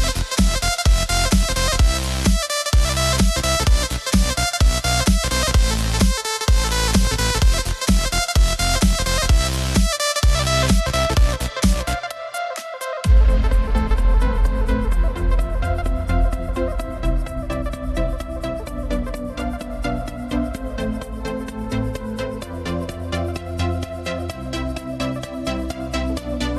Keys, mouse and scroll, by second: 0.0 middle click, 0.4-2.1 scroll up 1, 2.1 KP_7, 4.7-6.7 alt+drag, 6.7 ctrl+x, 8.1-11.1 middle drag, 11.8-14.8 alt+drag, 14.8 g, 21.0-22.2 drag, 22.2-22.6 scroll down 2, 22.7 scroll up 2, 23.5-24.3 scroll up 1, 25.0 alt+click, 25.9-26.5 scroll down 2.